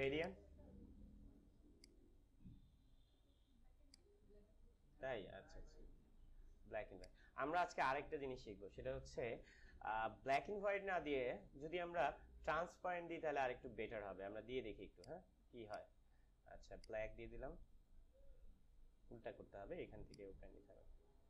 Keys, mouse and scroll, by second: 0.1-5.7 drag, 5.7 ctrl+z, 7.0 click, 10.2 click, 14.9-21.2 drag.